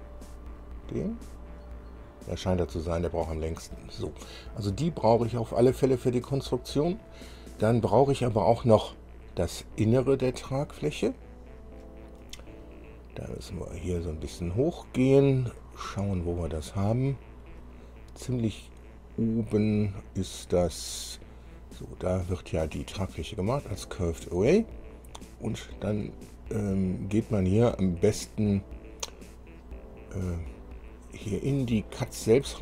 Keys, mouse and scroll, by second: 3.7-4.0 scroll down 2, 9.9-10.6 scroll up 2, 10.9 scroll up 2, 11.7 scroll up 2, 13.0-13.4 scroll up 2, 13.9-14.3 scroll up 1, 15.6-16.1 scroll up 1, 17.2-17.6 scroll up 1, 17.7-18.1 scroll up 1, 19.5-20.2 scroll up 1, 20.5 scroll up 1, 21.4 scroll down 1, 21.9 scroll up 2, 24.5 scroll down 2, 25.3 scroll down 2, 30.1-30.5 scroll down 2.